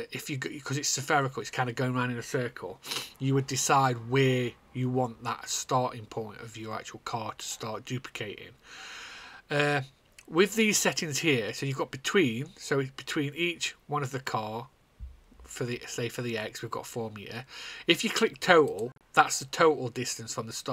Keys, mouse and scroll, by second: 19.2 click.